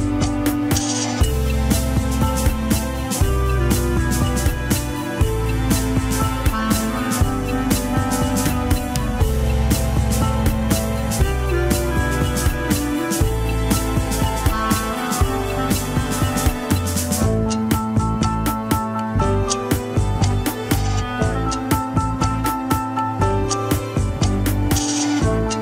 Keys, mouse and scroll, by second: 0.3-0.9 shift+middle drag, 0.9 click, 1.7 shift+drag, 2.3 shift+click, 3.3 ctrl+p, 5.2 drag, 5.6 shift+drag, 6.1 ctrl+Tab, 6.7 scroll up 2, 7.2 alt+z, 7.8 ctrl+Tab, 8.4 click, 10.1 shift+click, 10.3-10.9 shift+middle drag, 10.9 shift+click, 11.4 ctrl+Tab, 12.2 alt+z, 12.4 alt+z, 13.3 ctrl+click, 14.4 ctrl+l, 15.5-17.5 drag, 17.5 shift+w, 19.1-21.7 drag, 22.1 ctrl+Tab, 22.6 click.